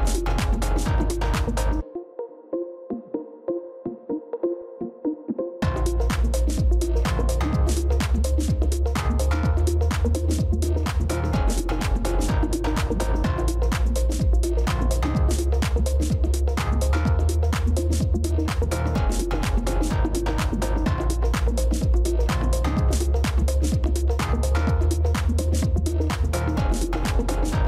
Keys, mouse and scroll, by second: 1.7 ctrl+shift+[.